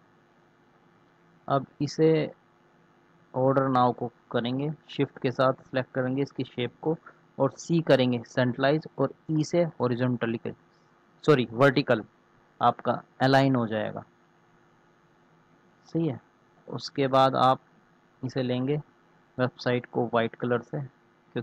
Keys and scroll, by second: 7.4 c, 9.1 e.